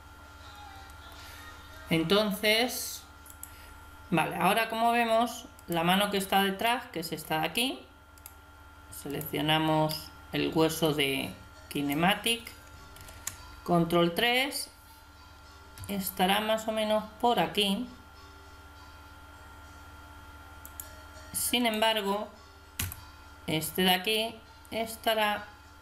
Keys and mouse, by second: 5.6 right click, 6.6-8.1 drag, 9.9 click, 12.9 ctrl+KP_3, 15.7 g, 21.6 right click, 22.7 g, 23.1 right click.